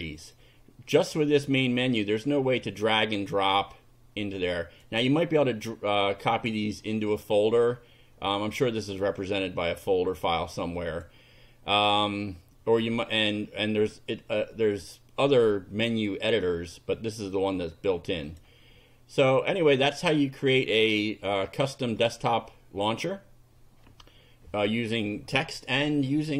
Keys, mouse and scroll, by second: 0.2 click, 2.0-5.0 drag, 10.3 click, 15.6 click, 18.2 click, 19.5 click, 20.5 click.